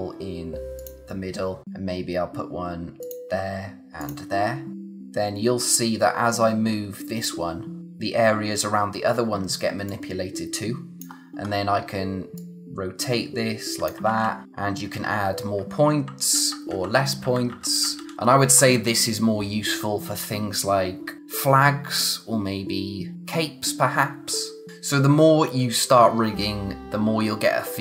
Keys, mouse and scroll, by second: 3.0 click, 9.9 click, 11.4-12.3 scroll up 1, 12.3 click, 14.0 ctrl+z, 14.4-15.5 scroll up 1, 16.3 ctrl+z, 24.7 click.